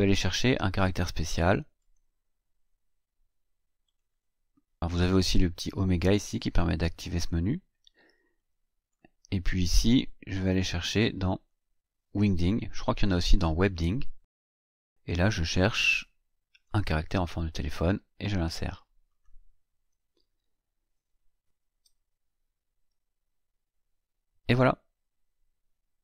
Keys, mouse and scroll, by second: 1.8 click, 3.8 click, 8.3-9.0 drag, 9.7 click, 10.5 click, 13.9 click, 16.5 click, 19.0 click, 22.3-23.5 ctrl+scroll down 4, 23.8 ctrl+scroll up 3.